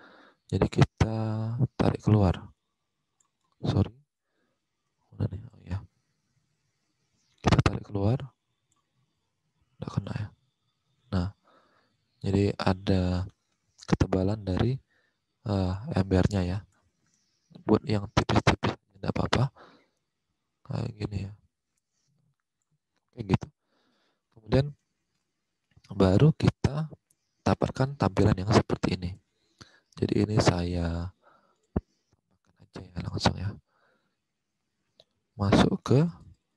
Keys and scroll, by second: 3.4 ctrl+z, 23.5 alt+Tab, 32.3 Return, 35.0-36.5 typing.